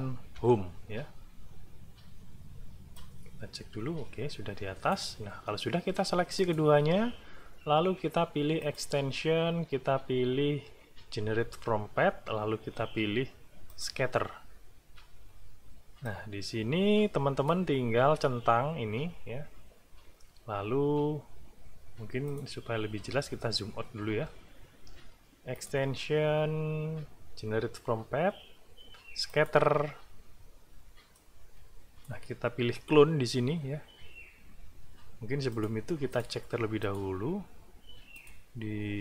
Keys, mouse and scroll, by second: 0.3 Home, 2.9-5.1 drag, 6.4 shift+click, 8.6 click, 13.7 click, 16.1-17.7 drag, 23.3-23.9 ctrl+scroll down 4, 25.5 click, 29.3 click, 31.1 click, 32.2-35.5 middle drag, 35.5 click, 36.1 click, 36.8 click, 38.1 click.